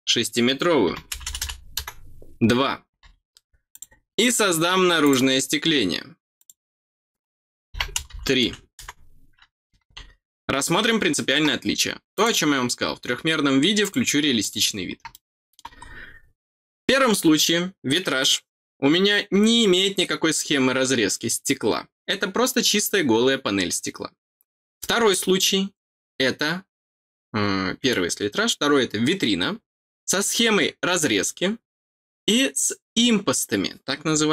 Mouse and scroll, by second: 3.7 click, 5.0 click, 6.3 click, 12.1 click, 13.8 click, 14.4 click, 15.1 middle click.